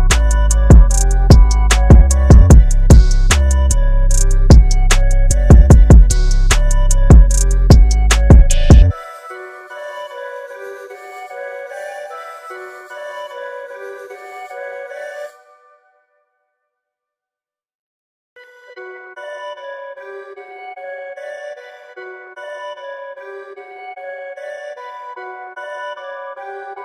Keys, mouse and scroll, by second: 4.1 click, 5.0 KP_2, 5.2 KP_5, 6.4 click, 7.9-9.4 scroll up 1, 13.6 click, 16.4 space, 16.6 click, 16.7 space, 20.7 click.